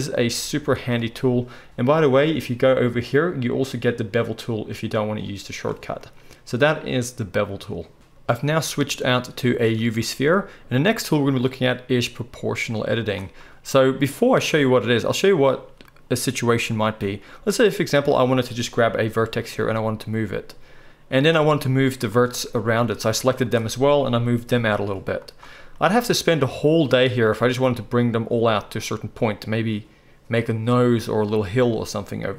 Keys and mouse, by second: 17.9 click, 18.0-22.1 middle drag, 19.6 g, 22.1 click, 22.2 middle click, 23.0 shift+click, 23.5 shift+drag, 24.5 g, 25.2-26.8 middle drag.